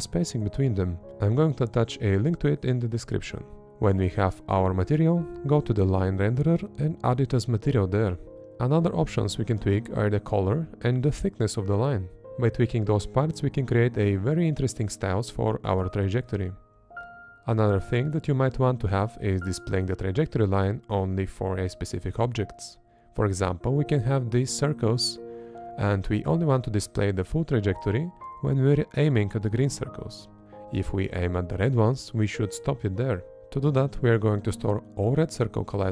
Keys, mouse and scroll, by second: 19.0 Up, 19.0 Left, 19.0 Down, 19.0 Right, 20.3 Left, 21.4 Right, 22.4 Up, 24.0 Up, 25.5 Up, 27.6 Left, 28.3 Left, 29.2 Up, 30.8 Left, 31.6 Left, 33.1 Right, 34.0 Right, 34.9 Right.